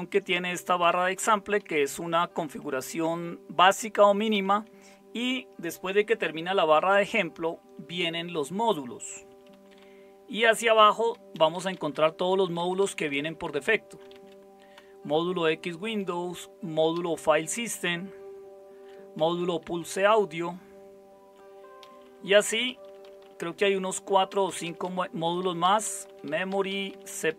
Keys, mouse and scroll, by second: 0.1 Down, 0.3 Down, 0.4 Down, 0.6 Down, 0.8 Down, 0.9 Down, 1.1 Down, 1.6 Up, 1.8 Up, 1.9 Up, 2.1 Up, 2.3 Up, 4.3 Down, 4.5 Down, 7.6 Down, 8.8 Down, 9.0 Down, 9.3 Down, 9.5-10.9 Down, 11.3 Down, 11.7 Down, 11.9 Down, 12.5 Down, 12.8 Down, 13.0 Down, 13.2 Down, 13.4 Down, 13.6 Down, 14.1 Down, 14.7-15.8 Down, 16.0 Down, 16.9 Down, 17.1-18.9 Down, 19.2 Down, 19.4 Down, 19.6-21.3 Down, 21.8 Down, 22.0 Down, 22.3 Down, 22.5 Down, 22.7 Down, 22.8 Down, 23.0 Down, 23.2 Down, 23.6 Down, 24.3 Down, 24.4 Down, 24.6 Down, 24.8 Down, 25.2 Down, 25.4 Down, 25.6 Down, 25.8 Down, 26.2 Down, 26.5 Down, 26.7 Down, 26.9 Down, 27.1 Down, 27.2 Down.